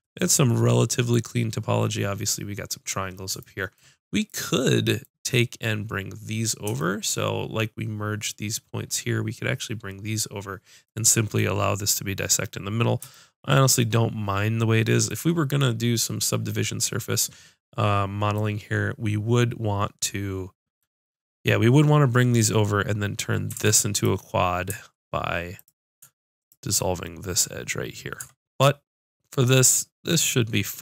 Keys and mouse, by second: 1.7 right click, 3.5 middle click, 5.5-6.8 middle drag, 16.4-18.2 middle drag, 18.6 middle click, 23.6 ctrl+Tab, 25.6 click, 26.8-28.2 drag, 28.2 Tab, 28.7 middle click.